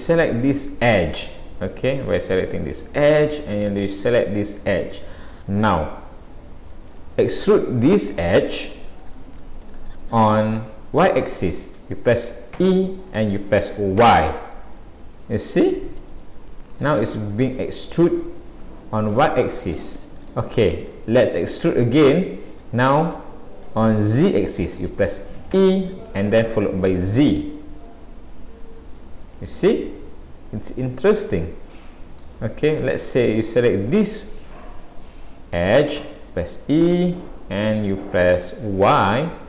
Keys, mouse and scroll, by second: 0.8 click, 2.5 click, 4.6 click, 4.6 middle click, 5.9 middle click, 18.5 middle click, 29.8 middle click, 33.3 click, 36.1 e.